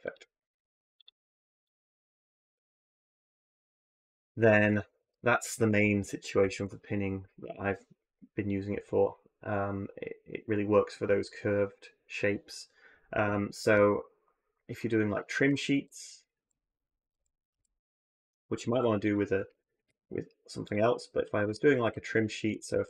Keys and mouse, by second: 1.5 click, 2.4 middle click, 2.6 click, 2.7 middle click, 3.2-4.4 middle drag, 4.2-6.4 typing, 4.8 Tab, 15.2 Tab, 15.6 z, 16.1 x, 16.9 a, 17.4 x, 18.5 x, 19.3 a, 20.7-21.1 drag, 21.2 Tab, 21.9 2, 22.5 ctrl+r.